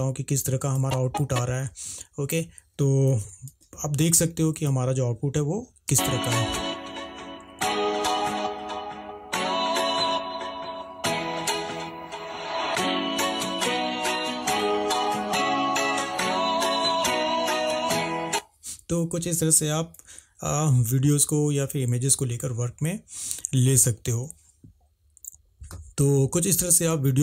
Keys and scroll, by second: 3.6 ctrl+`, 20.2 Escape.